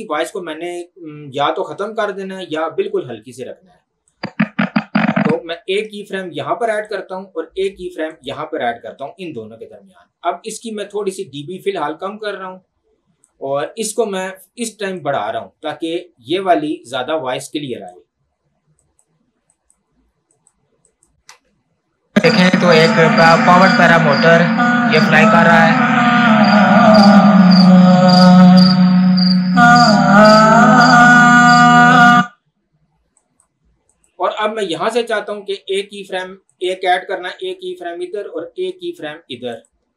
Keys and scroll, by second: 21.4 space, 32.1 space.